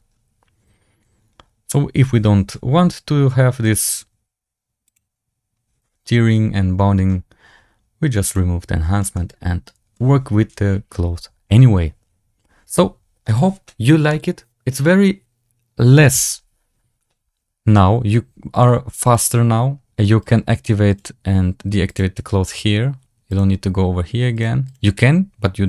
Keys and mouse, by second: 9.0-9.8 middle drag, 18.5 click, 19.0 click, 20.8 click, 21.8 click, 23.2 click, 24.2 click, 24.6-25.6 drag.